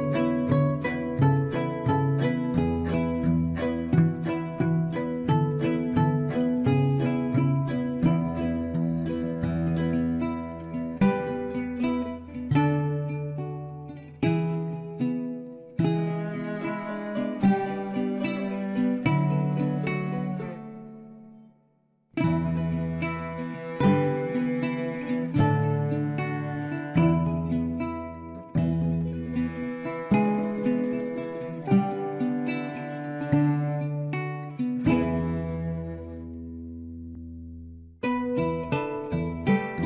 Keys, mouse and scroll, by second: 0.4-0.8 scroll up 5, 0.8 Tab, 1.5 click, 2.1 click, 2.8 alt+shift+click, 3.7 x, 4.9-5.4 scroll up 1, 5.4 middle click, 6.1 KP_7, 7.1 alt+shift+click, 7.5 click, 8.4 click, 8.6 click, 9.0 Tab, 9.3 Tab, 9.4 click, 10.0 middle click, 10.3-10.7 scroll down 4, 10.7 KP_7, 11.1 click, 11.3 scroll up 1, 11.8-14.5 typing, 15.5 scroll up 2, 15.8 r, 16.6 e, 17.6 click, 18.3 click, 18.6 alt+shift+click, 19.1 g, 19.8 r, 20.8 Tab, 21.0-21.5 scroll down 2, 21.1 middle click, 21.5 middle click, 22.2 scroll up 1, 22.4 KP_7, 22.7 Tab, 22.8-23.6 scroll up 1, 23.6 click, 23.9 ctrl+r, 24.6 r, 25.1 g, 25.7-26.0 scroll up 1, 26.0 alt+shift+click, 26.9 ctrl+z, 27.2 alt+shift+click, 27.5 g, 28.1 shift+middle click, 28.5 click, 29.3 r, 29.8 g, 30.4 scroll down 2, 30.5 Tab, 30.7-31.6 middle drag, 31.6-32.1 scroll down 2, 32.1-33.6 middle drag, 33.6-34.1 scroll up 3, 34.1-34.9 scroll down 1, 34.9-37.2 middle drag, 37.2 Tab, 37.7 Tab, 38.7-39.8 shift+middle drag.